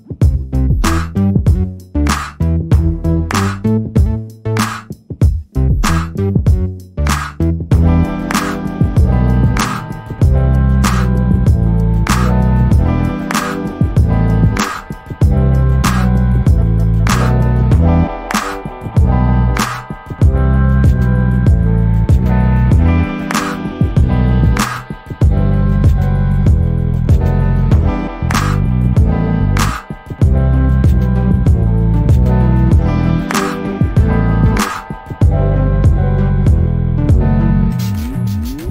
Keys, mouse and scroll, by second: 0.5 scroll down 1, 0.6 scroll up 1, 0.7 scroll down 1, 1.0 alt+click, 1.9-2.3 scroll up 1, 2.3 alt+click, 4.5 shift+double click, 6.1 shift+click, 9.9 scroll up 1, 10.5 shift+click, 12.0 shift+double click, 12.8 alt+click, 13.5-13.8 scroll down 1, 13.8 middle click, 14.1-14.5 scroll up 1, 14.5 middle click, 15.1-15.5 scroll up 1, 15.5 alt+click, 16.2 right click, 16.9 click, 18.1 alt+middle click, 18.5 alt+click, 21.5 ctrl+z, 21.8 click, 22.2 double click, 25.1 alt+click, 30.8-31.2 scroll down 1, 31.4 alt+click, 33.7 double click, 34.6 click, 34.8 double click, 35.1 scroll up 1, 35.4 alt+click, 37.8 alt+middle click, 38.1 alt+click.